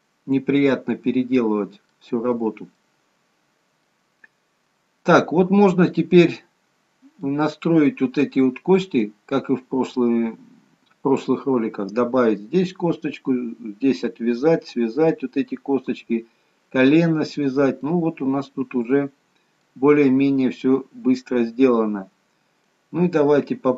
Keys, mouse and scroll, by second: 2.1-2.9 scroll up 1, 2.9 middle click, 2.9-3.9 scroll up 1, 4.1-5.4 scroll down 1, 6.3 middle click, 9.1 middle click, 17.7 middle click, 21.7 middle click.